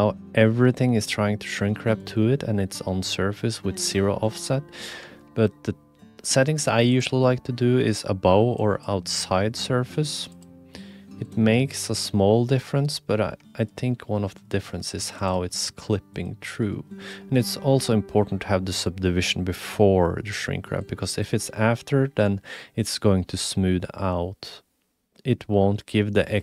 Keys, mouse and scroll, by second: 1.7-2.0 drag, 4.3 click, 7.0-8.8 drag, 10.3-11.3 drag, 11.9-12.8 drag, 13.5 shift+middle drag, 13.6 click, 14.4 click, 14.8 3, 15.1 click, 15.3 g, 16.2 click, 20.8-21.2 drag, 22.1-22.8 drag.